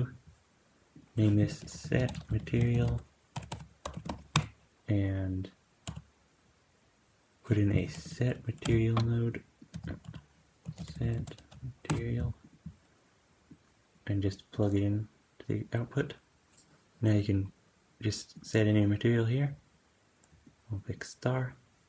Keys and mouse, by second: 3.4 BackSpace, 4.6 `, 5.7 q, 9.6 x, 9.9 q, 13.4-15.7 drag, 18.8-21.8 drag.